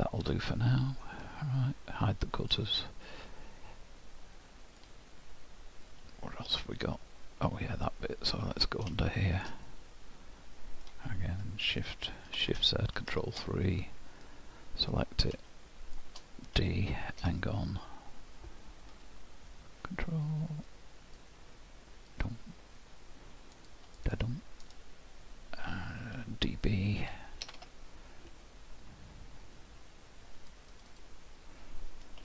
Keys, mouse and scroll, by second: 0.2 Tab, 2.4 click, 3.1 middle click, 5.9 middle click, 9.0 shift+middle click, 9.7 middle click, 12.4 shift+z, 13.1 ctrl+KP_3, 14.1 click, 14.9-15.3 scroll up 2, 15.5 shift+middle click, 16.6 d, 19.5 ctrl+click, 27.5 d, 29.4 click, 30.9 click.